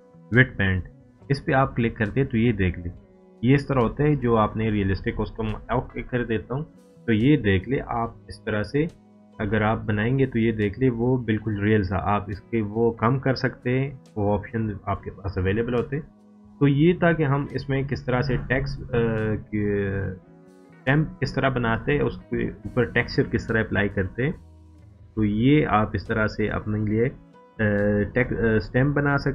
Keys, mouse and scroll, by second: 0.6-2.9 drag, 6.4 scroll down 1, 8.2 click, 8.2-9.1 drag, 9.8-10.2 scroll up 1, 11.3 scroll down 1, 14.1-14.6 scroll down 1, 17.2-19.4 drag, 24.5-25.8 drag.